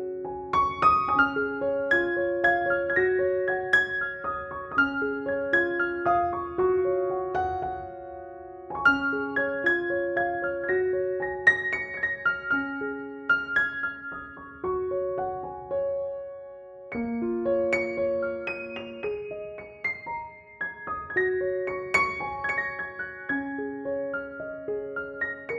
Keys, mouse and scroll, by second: 2.2 alt+click, 2.9 ctrl+=, 3.2-4.8 typing, 3.7-4.1 click, 4.3 click, 5.0 click, 5.4 ctrl+-, 6.8 ctrl+click, 7.0 ctrl+e, 7.7 ctrl+=, 9.1 space, 9.9 ctrl+j, 11.8 alt+t, 13.0 click, 13.0 click, 16.8 click, 17.2 ctrl+-, 18.5 ctrl+f, 19.4 click, 21.6-23.6 typing, 23.5-24.9 drag, 24.9 ctrl+-.